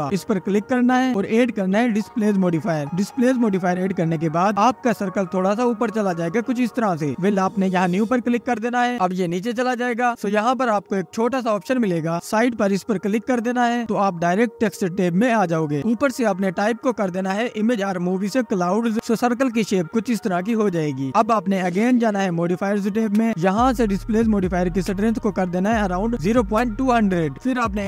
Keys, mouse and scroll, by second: 0.7-3.8 drag, 6.8 click, 9.4-11.0 drag, 12.8-15.8 drag, 16.6 click, 20.5 click, 22.1 click, 24.8-27.3 drag.